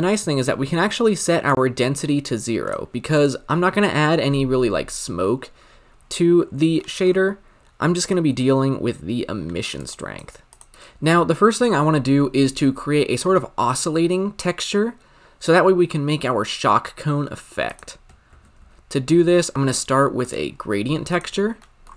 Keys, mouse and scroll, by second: 2.0-9.9 drag, 10.5-20.3 drag, 20.3 shift+a.